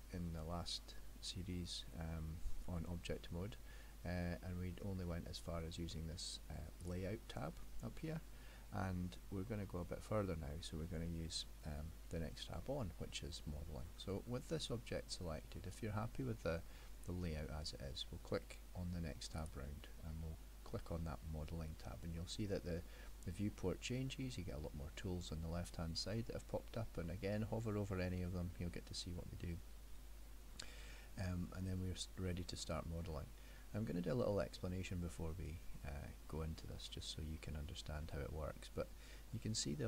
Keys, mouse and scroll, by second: 3.7 middle click, 6.8 click.